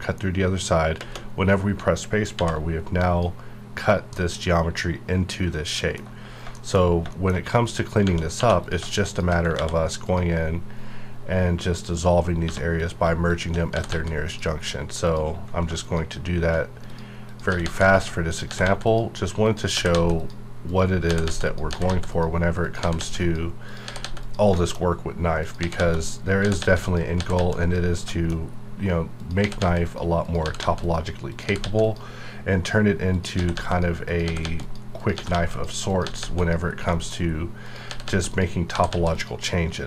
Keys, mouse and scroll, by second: 0.9 d, 1.1 space, 2.3 alt+v, 3.0 click, 4.1-6.3 middle drag, 6.3-6.8 scroll up 2, 6.5 shift+middle click, 7.1-7.4 shift+middle drag, 7.4-8.0 scroll up 1, 8.4 2, 8.6 click, 9.1 shift+click, 9.5 ctrl+x, 10.1 click, 12.4 1, 12.8 click, 13.3 shift+click, 13.7 g, 13.9 g, 14.3 click, 14.6 scroll up 1, 15.1 click, 15.8 shift+click, 17.5 g, 17.6 g, 17.8 click, 18.5 g, 18.6 g, 18.8 click, 19.7 g, 19.9 g, 20.2 click, 21.1-24.0 typing, 21.4 click, 22.1 click, 23.2 click, 24.2 click, 24.5 shift+middle click, 24.8 shift+scroll up 2, 25.4 click, 25.6-27.3 typing, 26.0 click, 26.8 click, 27.6 click, 28.0 scroll down 1, 28.1 shift+middle click, 28.5-29.2 scroll up 1, 29.2 click, 29.4-31.6 typing, 29.9 click, 30.8 click, 31.8 click, 33.3-36.2 typing, 33.7 click, 34.6 click, 35.5 click, 36.4 click, 36.7 scroll down 1, 36.9 shift+middle click, 37.1-37.7 shift+scroll up 1, 37.7 click, 37.9 g, 38.0 g, 38.3 click, 38.7 g, 38.9 g, 39.1 click.